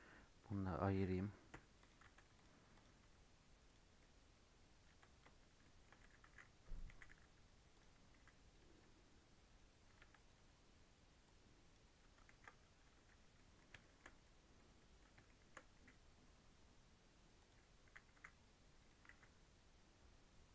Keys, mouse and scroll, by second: 1.5 p, 2.0 Tab, 2.3 click, 2.7 click, 3.0 Tab, 3.6 click, 4.0-6.0 middle drag, 6.0 g, 6.9 g, 8.1 s, 8.7-9.9 right drag, 9.9 Tab, 10.2-12.3 right drag, 12.3 ctrl+z, 12.8 Tab, 13.3 middle click, 13.6 scroll up 1, 13.8 shift+middle click, 14.1-14.7 scroll up 3, 14.3 middle click, 14.7 middle click, 15.1 scroll down 1, 15.2 shift+middle click, 15.7 e, 17.8 a, 18.1 s, 19.0 alt+s.